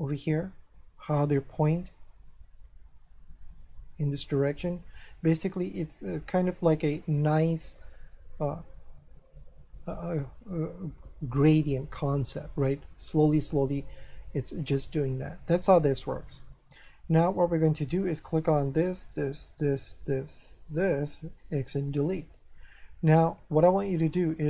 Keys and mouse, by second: 7.3 middle click, 15.9 middle click, 18.2 right click, 19.0 shift+right click, 21.6 x, 22.0 click, 22.5 shift+middle click.